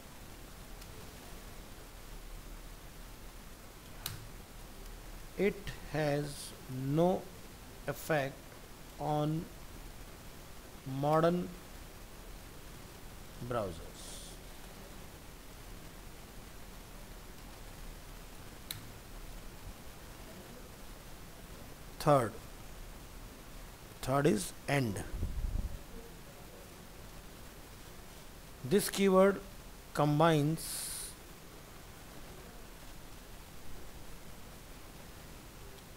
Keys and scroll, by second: 17.8 ctrl+s, 20.7 ctrl+v, 21.5 ctrl+Home, 21.6 ctrl+s, 26.4 ctrl+shift+Left, 32.3 ctrl+shift+Left, 33.8 ctrl+shift+Right.